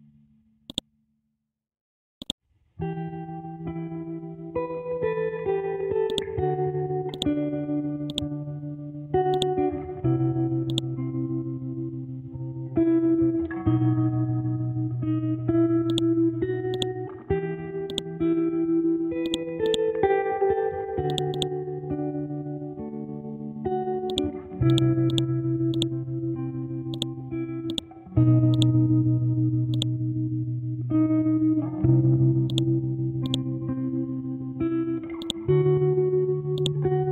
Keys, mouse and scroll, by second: 4.3-6.1 scroll up 1, 6.1 click, 7.8 c, 8.1 click, 8.6 scroll down 1, 9.3-13.7 drag, 13.7 scroll up 1, 16.3 ctrl+click, 20.1 scroll down 1, 20.7 ctrl+scroll down 1, 20.7 ctrl+z, 21.1 click, 22.1 c, 23.3 Left, 24.1-29.7 drag, 31.8-32.1 scroll up 1, 32.5 ctrl+click, 34.4-35.1 scroll down 1, 35.1 ctrl+scroll down 1, 35.2 ctrl+click.